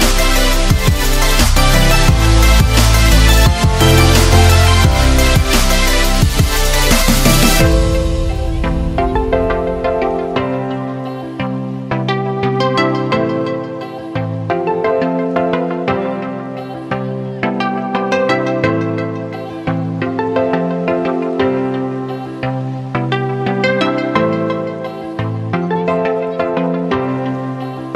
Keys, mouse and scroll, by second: 2.5 click, 20.6-25.1 drag.